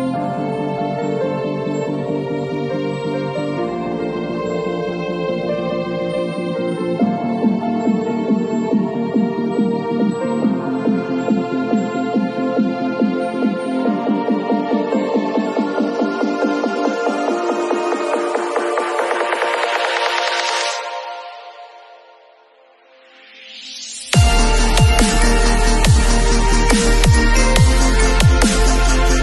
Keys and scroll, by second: 3.5 x, 12.0 ], 20.0 2, 23.3 3, 24.1 d.